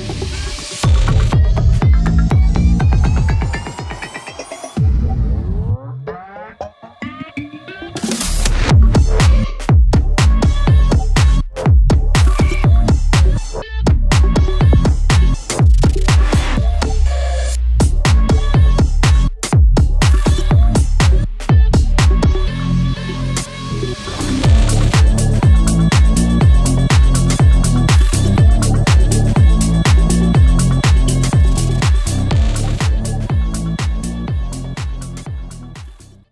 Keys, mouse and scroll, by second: 5.4 Return, 7.7-8.3 typing, 8.7 Return, 11.2-11.9 typing, 12.9 click, 14.7 F9.